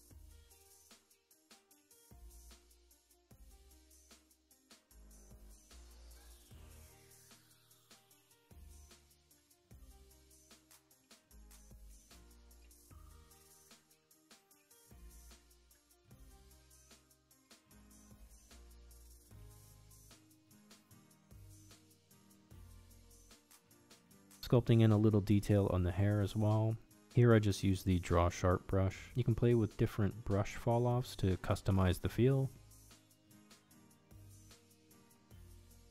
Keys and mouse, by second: 0.0-3.9 typing, 0.6 middle click, 1.1 middle click, 1.3 shift+middle click, 1.7 middle click, 2.1 shift+middle click, 2.6 middle click, 2.9 shift+middle click, 3.5 middle click, 3.6 ctrl+z, 3.7 middle click, 4.1 click, 6.2 shift+c, 6.3 ctrl+click, 6.8 ctrl+click, 7.0 ctrl+click, 8.3 click, 8.5 click, 9.2 shift+click, 9.8 shift+c, 9.9 click, 10.3 f, 10.5 shift+click, 10.6 shift+click, 11.0 middle click, 11.9 ctrl+Tab, 12.2 f, 12.3 shift+c, 12.4-14.0 drag, 14.1 middle click, 14.2 click, 14.6 shift+c, 14.7 ctrl+click, 15.3 ctrl+Tab, 15.7 shift+click, 16.6 shift+c, 16.7 click, 17.8 shift+c, 17.9 ctrl+click, 18.4 shift+click, 18.7 shift+v, 18.8 shift+c, 19.3 click, 19.7 click, 20.2 shift+c, 20.2 ctrl+click, 20.6 ctrl+shift+click, 20.7 ctrl+shift+Tab, 21.1 f, 21.3 shift+c, 21.3 click, 22.3 shift+c, 22.3 ctrl+click, 24.2 click, 24.4 shift+middle click, 25.0 ctrl+Tab, 26.1 click, 26.4 middle click, 26.7 click, 27.3 KP_Decimal, 27.6 ctrl+middle click, 27.9 click, 28.4 click, 29.0 ctrl+z, 29.5 ctrl+z, 29.5 f, 29.6 click, 30.4 click, 31.1 shift+middle click, 31.3 middle click, 32.8 click, 33.7 middle click, 33.9 middle click, 34.4 click, 35.1-35.9 drag.